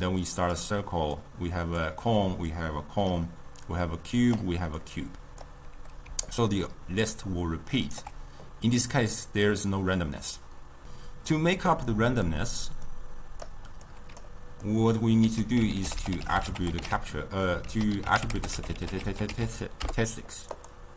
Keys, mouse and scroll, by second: 0.0-6.2 typing, 0.0 click, 1.3 click, 2.6 click, 3.8 click, 4.9 click, 6.4-8.1 right drag, 8.1 d, 11.9-12.9 middle drag, 12.9-14.7 drag, 14.7-15.2 middle drag, 15.2 ctrl+a, 16.0 t, 18.4 t.